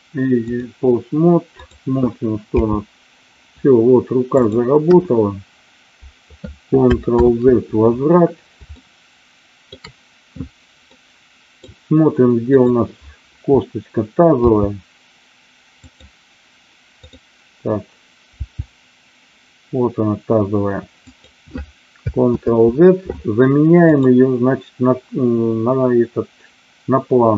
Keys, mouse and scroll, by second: 1.6 click, 2.5 g, 4.3 click, 4.7 KP_1, 7.1 ctrl+z, 8.7-9.7 shift+middle drag, 10.8-11.6 middle drag, 14.3 g, 15.8 click, 17.1-18.1 drag, 18.4 g, 21.0 click, 22.2 ctrl+z, 23.9-27.3 drag.